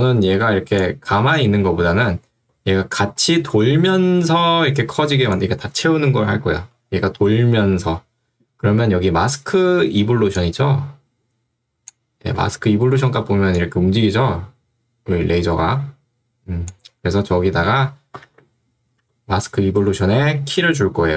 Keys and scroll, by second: 2.5 2, 6.9 Escape, 12.4 ctrl+2, 13.0 Escape, 17.2 ctrl+z, 18.4 ctrl+z, 19.0 ctrl+2, 20.6 Escape.